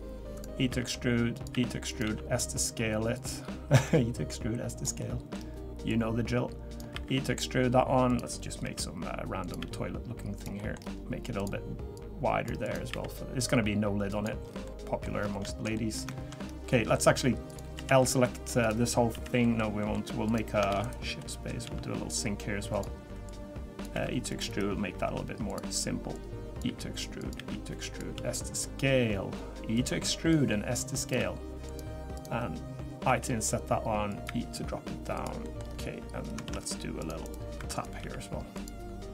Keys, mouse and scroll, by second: 0.7 e, 1.5 e, 2.0 s, 3.8 click, 5.0 middle click, 5.9 click, 8.6 i, 9.6 e, 10.6 middle click, 10.8-11.4 scroll up 4, 11.4 click, 11.9 click, 12.6 click, 12.9 e, 14.4 scroll down 3, 14.6 middle click, 15.2 scroll down 2, 15.5 shift+middle click, 15.7 middle click, 16.1 shift+middle click, 16.1-16.6 shift+scroll up 2, 16.6 scroll down 1, 16.7 middle click, 17.5 click, 17.7 l, 18.0 middle click, 18.6 click, 19.1 l, 19.4 middle click, 20.2 click, 20.2 middle click, 20.7 shift+d, 21.2 middle click, 21.6 s, 23.2 click, 23.9 e, 25.0 i, 26.1 click, 26.6 e, 27.3 e, 28.1 s, 30.3 click, 31.2 e, 32.1 click, 33.1 i, 35.1 e, 35.4 middle click, 35.6-36.0 scroll up 4, 36.4 ctrl+r, 37.6 3, 37.7 click, 38.0 e.